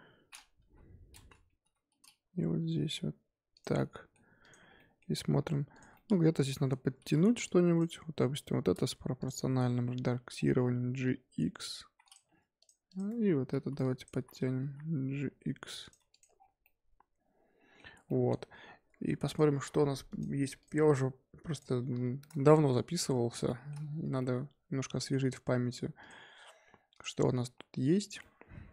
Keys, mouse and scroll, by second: 0.4 scroll up 2, 0.6 KP_1, 1.6 g, 3.7-4.4 middle drag, 4.4 click, 4.6 scroll down 1, 4.7-5.1 middle drag, 5.1-5.7 scroll up 2, 5.7 click, 5.9-6.3 shift+middle drag, 6.3 click, 6.5 middle click, 6.8 Tab, 7.0 z, 7.2 1, 7.4 click, 8.1 scroll up 1, 8.3 z, 9.2 click, 9.4 scroll down 3, 9.6-9.9 scroll up 1, 9.9 g, 12.2 Tab, 12.6 click, 12.8 click, 13.0 Tab, 13.5 z, 13.8 click, 14.1 z, 14.6 g, 15.9 Tab, 16.1 click, 16.3 scroll down 4, 16.6-19.2 middle drag, 19.2 click, 20.6-21.9 drag, 21.9 scroll down 3, 22.2-22.5 middle drag, 22.5-23.4 scroll up 3, 23.4 shift+middle drag, 23.7-24.1 scroll up 4, 24.1-26.0 middle drag, 26.0 click, 27.3-28.2 scroll down 6, 28.2-28.7 middle drag.